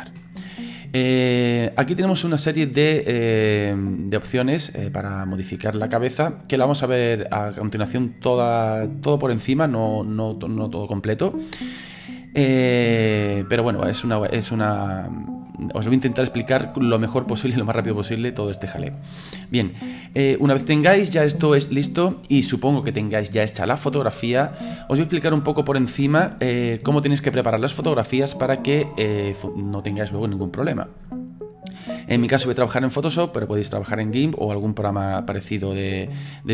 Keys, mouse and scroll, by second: 0.5-1.3 scroll up 1, 1.3-4.3 middle drag, 5.9-8.9 middle drag, 15.5-18.5 middle drag, 20.1-23.2 middle drag.